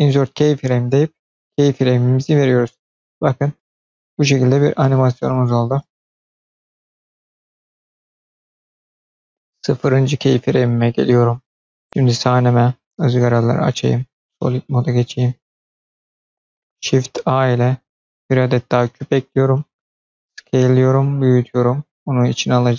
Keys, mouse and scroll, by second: 1.0-2.2 drag, 2.5 space, 7.7 space, 9.1-9.8 drag, 11.3-13.4 drag, 14.0 click, 15.8 click, 16.0 middle drag, 16.3 scroll up 2, 16.4 middle click, 17.5 shift+a, 20.3 s.